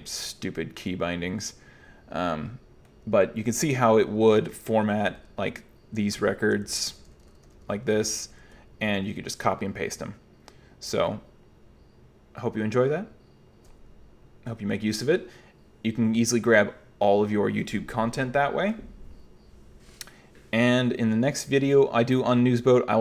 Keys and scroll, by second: 3.1-8.7 typing, 6.2 Escape, 18.1 super+q.